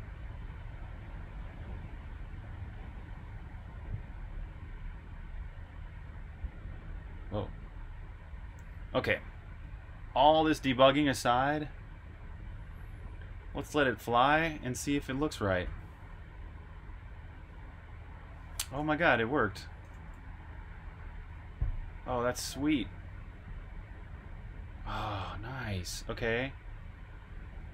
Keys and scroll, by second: 19.7-20.7 typing, 22.7 typing.